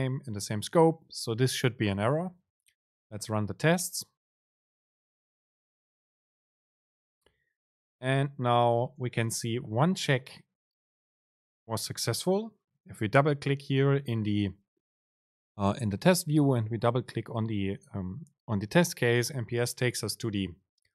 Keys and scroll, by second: 6.0 super+r.